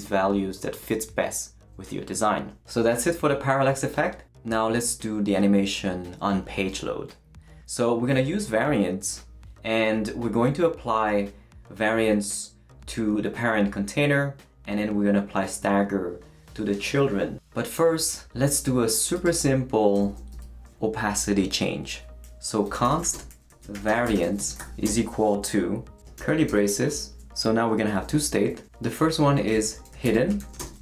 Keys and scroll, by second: 19.9 Return, 20.3 Up, 22.4-25.1 typing, 26.2 shift+[, 26.5 shift+Return, 29.2-30.8 typing.